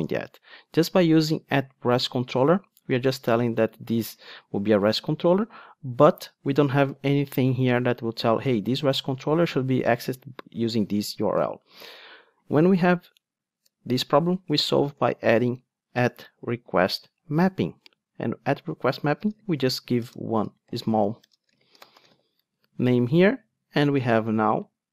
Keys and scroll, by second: 4.2 super+b, 11.5 ctrl+Tab, 17.3 Return.